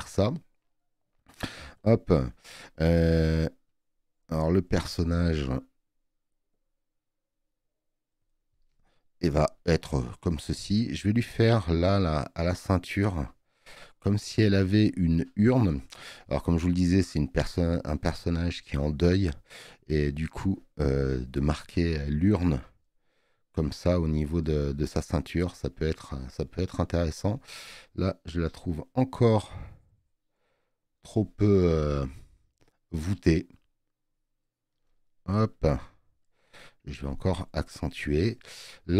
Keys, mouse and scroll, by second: 25.8 space, 26.0 click.